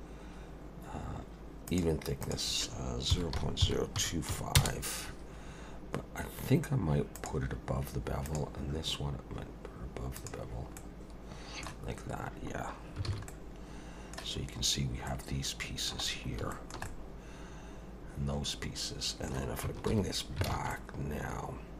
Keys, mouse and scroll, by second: 1.7 click, 2.2 click, 7.2 click, 8.3 click, 10.2 click, 10.8 middle click, 11.9 scroll up 2, 12.6 scroll down 1, 13.1 alt+a, 13.3 middle click, 14.5 scroll up 1, 15.1 middle click, 16.1 scroll down 2, 16.5 shift+middle click, 16.9 middle click, 19.9 alt+h, 20.5 alt+a, 20.7 middle click.